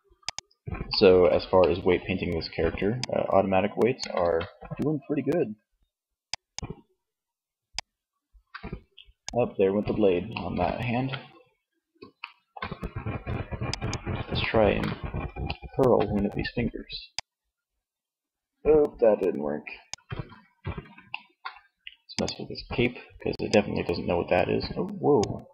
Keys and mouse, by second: 1.9-3.3 drag, 3.3 ctrl+z, 10.0 ctrl+z, 13.8 middle click, 14.4 middle click, 16.3-17.4 drag, 19.4 ctrl+z, 22.9-24.2 drag, 24.4 middle click.